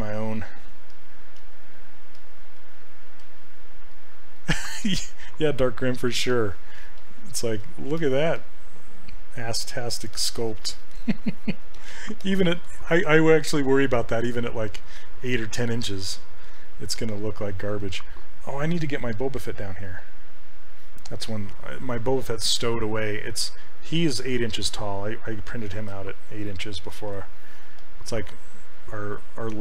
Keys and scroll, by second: 1.4 s, 3.3 s, 8.4 s.